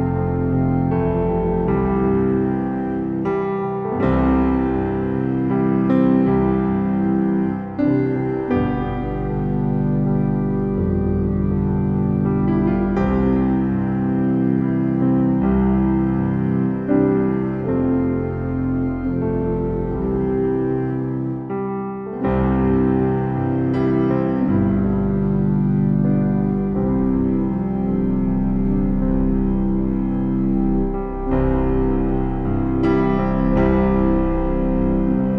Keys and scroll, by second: 3.5 ctrl+t, 25.3 ctrl+e, 29.2 ctrl+t.